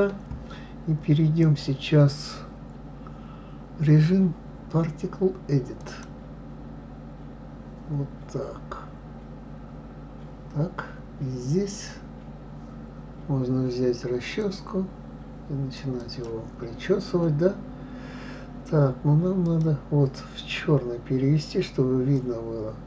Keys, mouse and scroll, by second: 2.1-5.1 drag, 15.1-19.7 drag, 20.1 click.